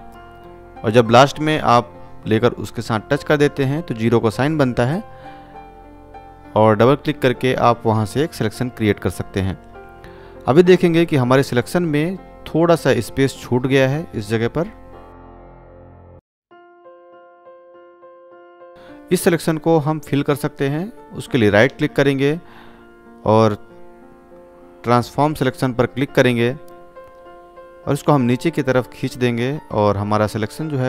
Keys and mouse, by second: 10.5 ctrl+space, 10.9 ctrl+click, 11.0-11.8 ctrl+space, 12.3 space, 15.2 click, 15.8 click, 16.3-17.2 click, 18.2 ctrl+click, 20.9 right click, 26.1-30.5 drag.